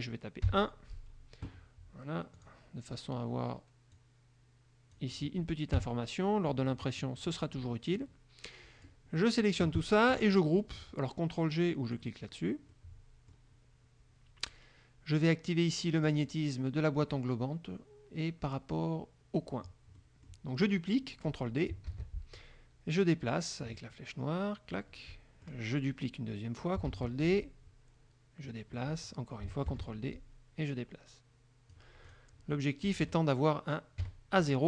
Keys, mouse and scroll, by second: 0.6 KP_1, 2.5 click, 4.1-5.5 drag, 5.9 KP_Subtract, 6.9 click, 7.3 middle click, 8.1-9.2 drag, 9.3 middle click, 9.4 click, 12.1 click, 12.9 click, 16.3 click, 19.5 click, 20.1 middle click, 22.1 ctrl+d, 23.2-25.1 drag, 27.1 ctrl+d, 27.4-28.8 ctrl+drag, 28.9 click, 29.9 ctrl+d, 30.3-32.1 ctrl+drag, 32.2 click, 33.0 KP_Subtract, 34.1 KP_Subtract.